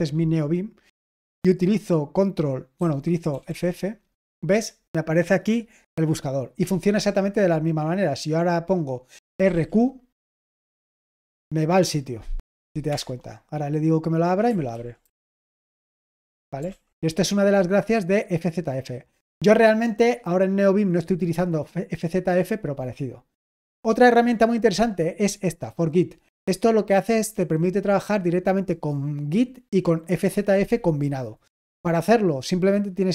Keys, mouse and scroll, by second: 3.0-3.9 typing, 9.0-10.0 typing, 14.5-15.7 typing, 16.6 ctrl+l, 18.2-19.8 scroll down 1, 21.3-22.5 scroll down 1, 22.5-23.3 scroll down 1, 23.3-32.3 scroll up 1, 32.3-33.1 drag.